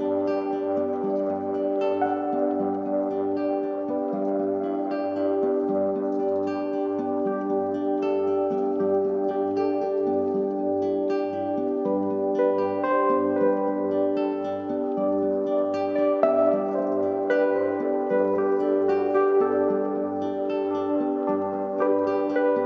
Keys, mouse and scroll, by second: 8.7 right click, 10.1 click, 21.0-22.6 drag.